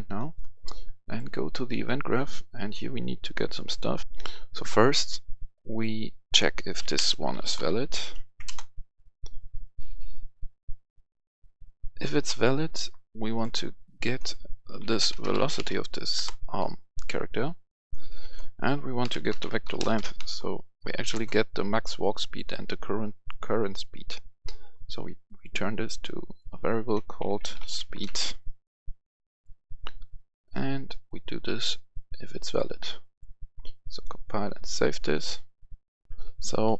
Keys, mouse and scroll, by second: 0.1 right click, 0.9 click, 1.6 right click, 3.9 click, 4.1 F10, 5.8-7.1 drag, 6.7-8.2 typing, 8.4 Return, 9.5-12.0 drag, 12.0 right click, 13.3-15.1 drag, 14.7-15.5 typing, 16.2 Return, 17.9 click, 19.0-20.9 typing, 21.1 Return, 21.8 right click, 23.2-26.1 drag, 27.2-27.9 typing, 28.0 Return, 28.8 click, 30.1-34.5 drag, 36.1 F10, 36.6 right click.